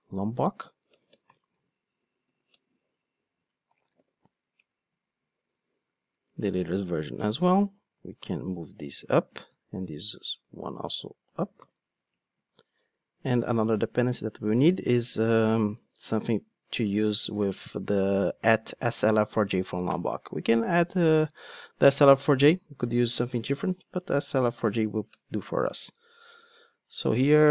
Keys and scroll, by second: 2.9 Return, 8.1 alt+super+v, 25.5 Return.